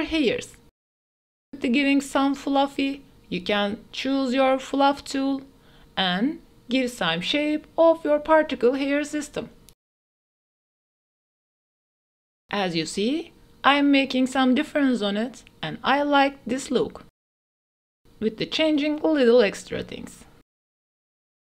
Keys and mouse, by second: 0.3-1.1 middle drag, 1.1-4.9 drag, 6.9-8.3 drag, 8.3 ctrl+z, 8.5 click, 9.7 click, 12.6-21.5 drag.